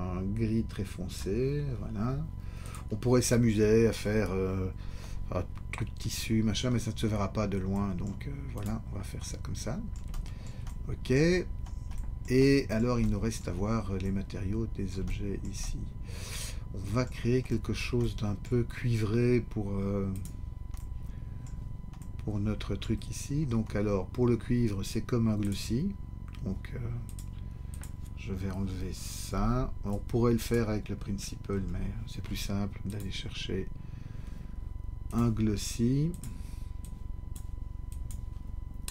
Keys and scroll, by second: 29.3 BackSpace, 31.5 Delete.